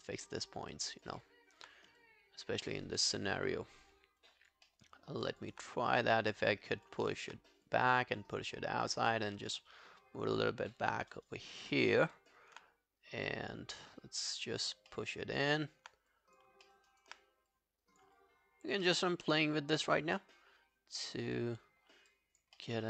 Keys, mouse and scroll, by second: 0.5 alt+click, 2.7 alt+middle click, 2.9 alt+right click, 3.4 alt+middle click, 4.2 alt+click, 4.7 alt+middle click, 5.0 alt+scroll down 1, 5.3 alt+click, 7.1 alt+click, 11.0 alt+middle click, 11.2 alt+right click, 11.4 alt+click, 11.7 alt+middle click, 12.0 alt+right click, 12.2 alt+click, 14.9 alt+middle click, 15.2 alt+right click, 16.7 alt+middle click, 16.9 alt+right click, 18.2 alt+click, 18.9 alt+middle click, 19.4 alt+click, 21.6-22.1 scroll down 10, 22.1 alt+click, 22.6 alt+middle click.